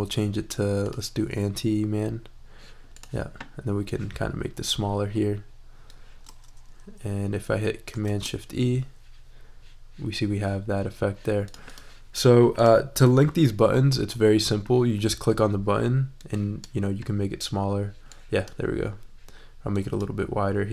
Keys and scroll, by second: 8.0 shift+super+e.